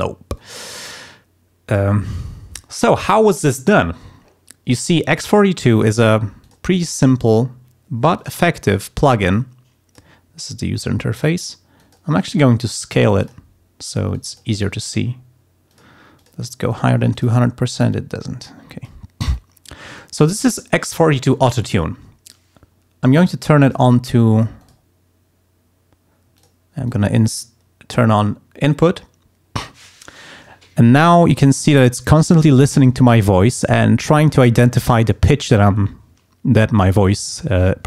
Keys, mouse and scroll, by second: 0.3 click, 1.6 click, 6.4 click, 7.2 click, 8.1 click, 9.3 click, 10.8 click, 11.7 click, 12.1 right click, 13.2 click, 14.1 click, 14.5 right click, 15.7 click, 16.1 click, 16.7 click, 17.1 click, 17.9-19.0 drag, 19.3-20.3 drag, 23.2 click, 24.6 click, 26.3 click, 26.8-28.8 drag.